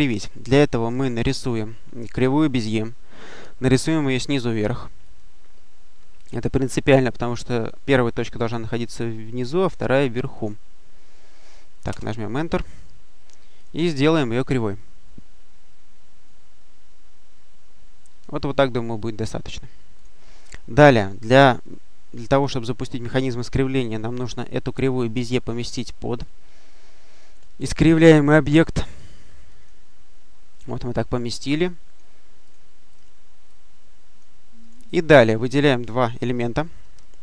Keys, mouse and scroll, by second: 1.1 click, 4.9 click, 10.2 click, 11.7 Return, 13.5 click, 14.7-18.5 drag, 19.8 click, 20.9-23.2 drag, 29.3 click, 31.5-33.3 drag, 33.3 click, 34.7 click, 35.5 click.